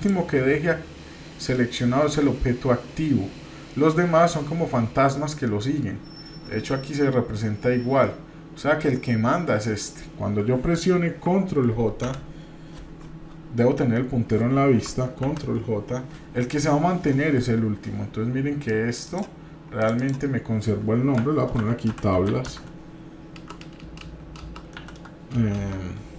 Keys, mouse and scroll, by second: 15.2 ctrl+j, 18.7 click, 19.0 click, 19.8 click, 20.0-26.1 drag, 23.6 BackSpace, 24.0 BackSpace.